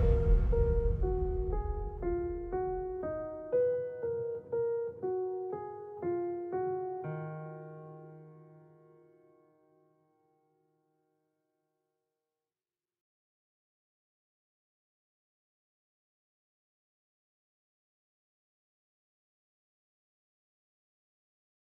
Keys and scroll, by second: 7.2 Escape.